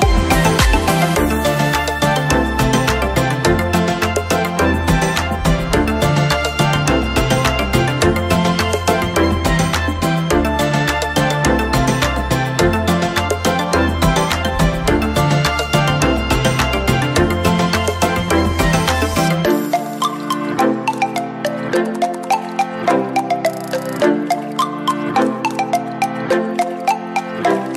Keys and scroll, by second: 12.8 ctrl+?, 24.1 ctrl+(, 25.3 ctrl+,.